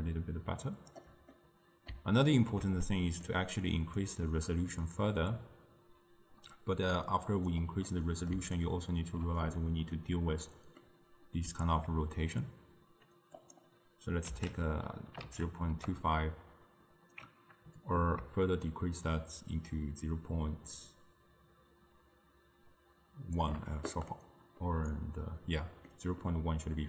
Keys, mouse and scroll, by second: 1.4-4.1 middle drag, 4.1-7.2 drag, 7.9 middle click, 8.7-13.2 ctrl+middle drag, 13.4-16.6 drag, 17.9-21.0 drag, 24.2-26.8 middle drag.